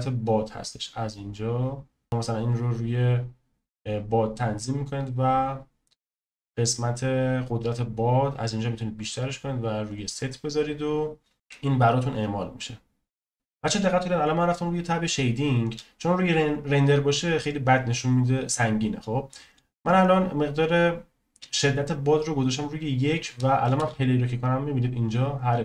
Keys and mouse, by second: 1.1-2.5 drag, 9.9 click, 23.8 space.